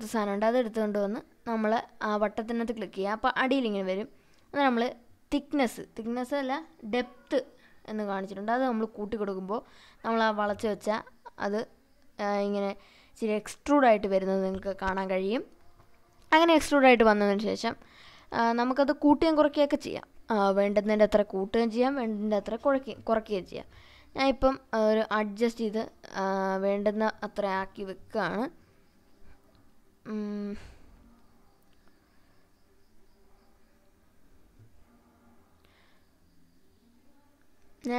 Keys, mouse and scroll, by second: 1.9-4.0 drag, 6.3 click, 8.0-10.7 drag, 11.0-12.0 scroll up 2, 12.2-13.9 middle drag, 13.9-14.6 scroll down 2, 16.1-16.9 scroll down 1, 16.9 click, 19.0 click, 21.3-22.5 drag, 23.0-24.4 drag, 25.2-30.2 drag, 31.2-33.7 drag, 35.2 click, 37.6 click.